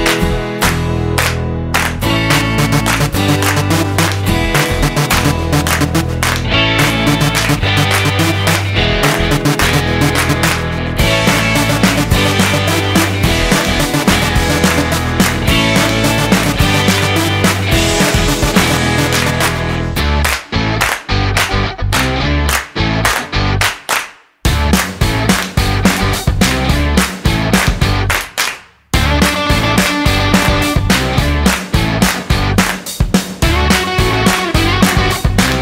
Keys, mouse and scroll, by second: 3.8 middle click, 4.4 scroll up 3, 4.8 middle click, 6.4 click, 9.1 click, 20.4 click, 22.4 click, 23.9 click, 26.0 click, 31.9 click, 35.1 click.